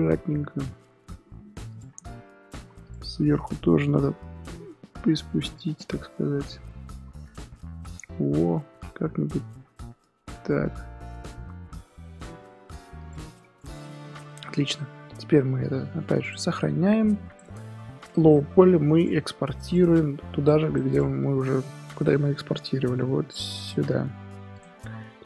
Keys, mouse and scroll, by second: 2.9 click, 3.9 l, 14.9 Tab, 21.1-24.6 drag.